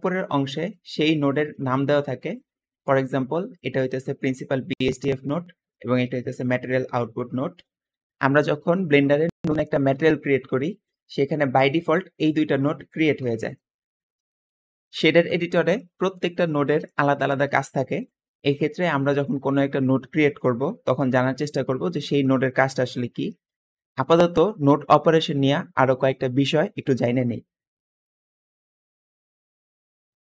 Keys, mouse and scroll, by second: 1.2-2.2 drag, 5.6 click, 6.5 click, 9.2 Escape, 10.2-11.1 scroll down 2, 10.5 middle click, 11.3 click, 11.7 g, 12.8 click.